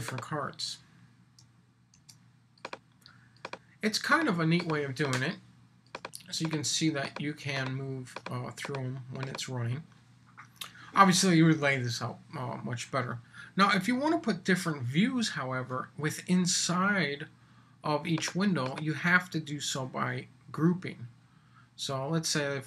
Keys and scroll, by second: 1.9 super+v.